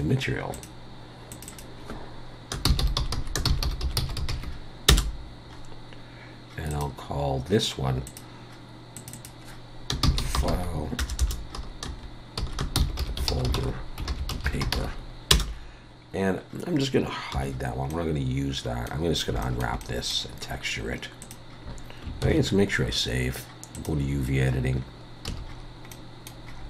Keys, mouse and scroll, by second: 1.3 click, 6.7 click, 8.1 click, 9.0 click, 11.2 BackSpace, 17.4 h, 17.9 middle click, 19.1 scroll down 1, 19.4 shift+middle click, 19.8 middle click, 21.2 click, 22.3 ctrl+s.